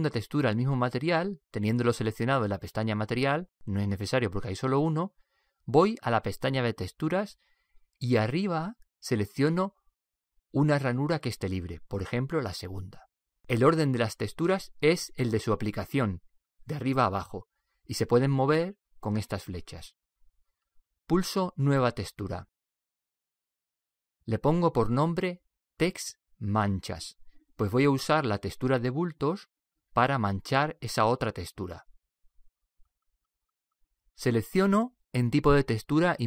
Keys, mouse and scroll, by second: 0.0 click, 3.1-10.6 drag, 11.4 click, 25.2 click.